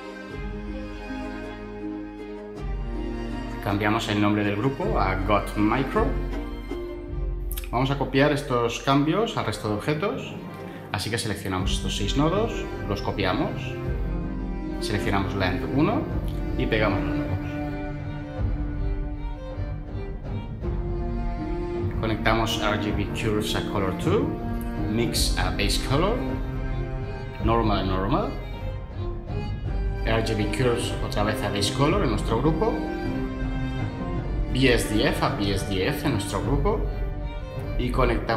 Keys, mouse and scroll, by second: 4.5-7.2 typing, 13.7 ctrl+c, 16.8 ctrl+v.